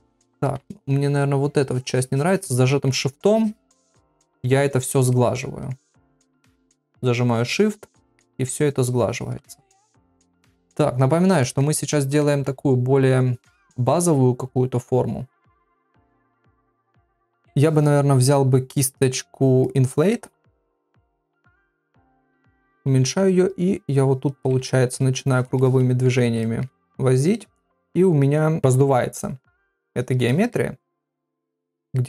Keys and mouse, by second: 0.7 ctrl+middle click, 1.6 shift+click, 2.7 middle click, 3.2 shift+click, 3.4 shift+click, 4.1 ctrl+middle click, 4.7 shift+click, 5.1 middle click, 6.1 shift+click, 6.4 shift+click, 6.7 middle click, 7.3 shift+click, 8.0 middle click, 8.4 shift+click, 9.5 middle click, 10.0 ctrl+middle click, 10.4 middle click, 11.5 ctrl+middle click, 12.2-17.5 middle drag, 20.1 middle click, 21.1 [, 21.8-23.0 [, 23.6 click, 24.4 ], 24.6 ], 24.7 ], 24.9 ], 25.0 click, 25.6 middle click, 26.4 ctrl+middle click, 27.1 click, 27.9 middle click, 29.6 click, 30.3 middle click, 31.0 click, 31.6 middle click.